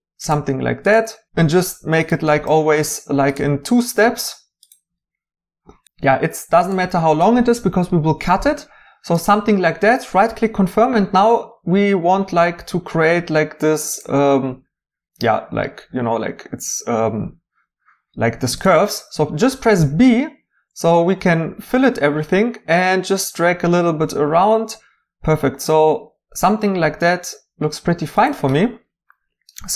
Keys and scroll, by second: 19.8 b.